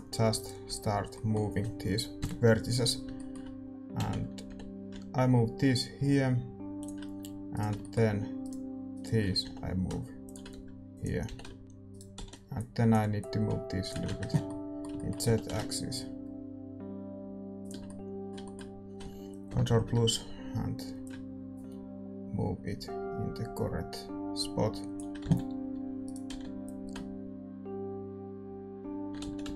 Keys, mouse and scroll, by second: 0.3 right click, 0.6 z, 1.1-5.7 middle drag, 2.2 KP_7, 3.9 z, 4.4 g, 7.2 a, 7.5-10.7 right drag, 7.7-10.5 middle drag, 9.4 g, 10.5 s, 11.2 g, 11.6 middle click, 11.6-14.1 right drag, 11.6 z, 12.1 z, 12.5-14.9 drag, 14.1 ctrl+z, 14.4-17.2 middle drag, 15.2 g, 17.8-21.0 middle drag, 19.5 ctrl+KP_Add, 19.6 ctrl+KP_Add, 21.0-22.9 drag, 25.2 z, 26.0-28.2 right drag, 26.3 z, 26.6-28.8 drag, 28.8 ctrl+r, 28.8 a, 29.2 ctrl+z.